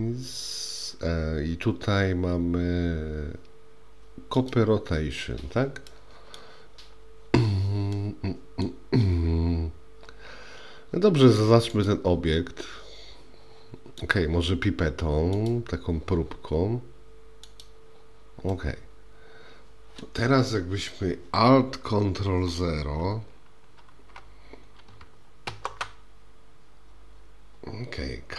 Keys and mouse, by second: 5.9-6.4 middle drag, 8.0-8.7 middle drag, 11.9-14.1 drag, 15.4 click, 18.5-20.1 middle drag, 25.5 ctrl+alt+KP_0.